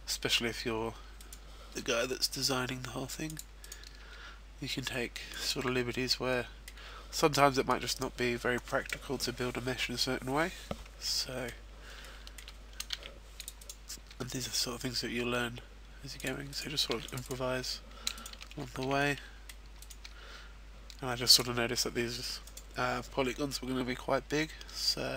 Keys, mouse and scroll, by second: 0.6-1.1 scroll down 1, 1.2 right click, 1.9 g, 3.4 click, 3.6 right click, 4.0 g, 5.5 click, 5.5 a, 5.7-6.0 scroll down 2, 6.0 middle click, 7.4 middle click, 11.1 middle click, 11.6 scroll up 2, 11.9 shift+middle click, 12.9 ctrl+r, 13.5 click, 14.2 g, 16.5 right click, 16.9 ctrl+r, 17.1 click, 17.7 right click, 18.1 shift+right click, 18.5 f, 18.8 a, 19.0 middle click, 19.8 right click, 20.2 g, 21.4 click, 22.4 right click, 23.1 g.